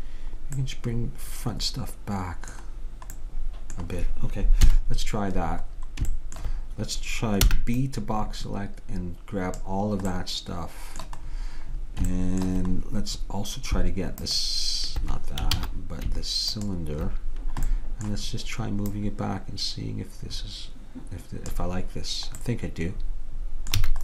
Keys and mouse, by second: 4.7 KP_3, 7.6 b, 14.3-16.2 drag, 15.6 ctrl+z, 16.6-18.4 drag, 17.8 middle click, 19.1-20.8 drag, 19.1 middle click, 22.5-23.9 middle drag, 23.9 a.